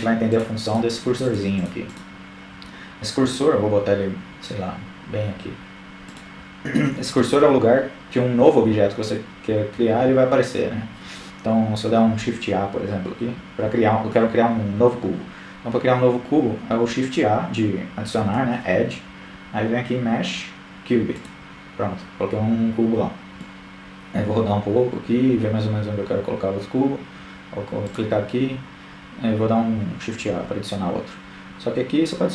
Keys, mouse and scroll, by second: 3.2-4.6 drag, 15.0 shift+a, 20.9-23.9 middle drag, 24.8-26.2 drag, 27.3 shift+a.